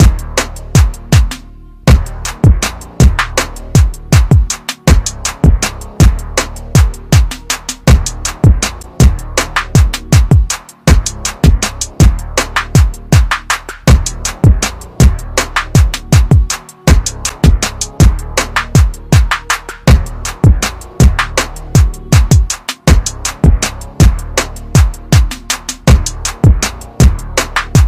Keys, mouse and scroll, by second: 3.7 click, 9.3 click, 13.1 typing, 25.6 click, 27.4 ctrl+KP_Add, 27.5 ctrl+KP_Add.